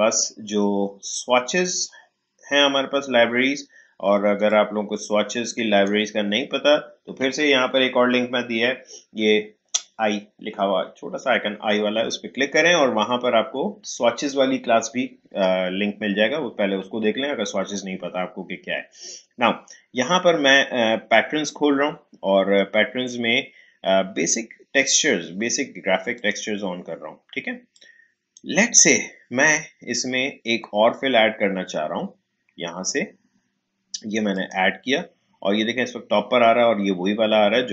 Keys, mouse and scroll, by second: 4.4-8.8 drag, 26.1-30.7 drag, 34.3 click.